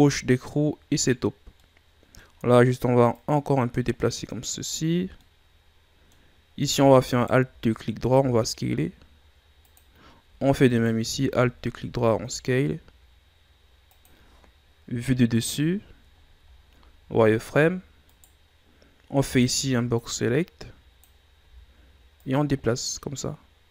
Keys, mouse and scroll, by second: 1.5 middle click, 2.3-3.1 scroll up 1, 3.1-5.2 drag, 5.2-6.3 middle drag, 6.3-7.1 scroll up 1, 7.1 alt+right click, 8.1 s, 10.6 alt+right click, 11.2-11.5 scroll down 1, 11.5-12.0 shift+scroll up 1, 12.0 s, 14.9 KP_7, 15.8-16.2 ctrl+scroll up 1, 16.2 scroll down 1, 16.5-17.0 shift+scroll up 2, 17.0 z, 17.3-18.0 scroll down 1, 18.0 right click, 19.1 b, 21.4 z, 22.1-23.7 drag.